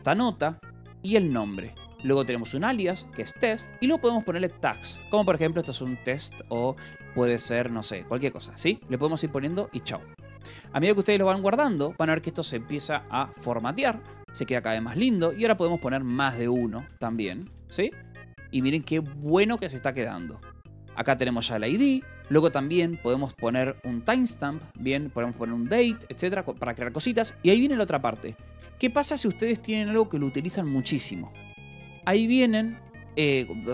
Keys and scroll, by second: 0.4-7.0 typing, 3.4 Escape, 8.1 BackSpace, 10.3 Escape, 11.4 ctrl+s, 14.5 j, 15.0 o, 16.2 =, 16.4 space, 16.8 t, 17.2 2, 17.4 Return, 18.3 Escape, 19.1 ctrl+s, 20.8 j, 21.7 shift+v, 21.9 Escape, 23.3 o, 24.7 Escape.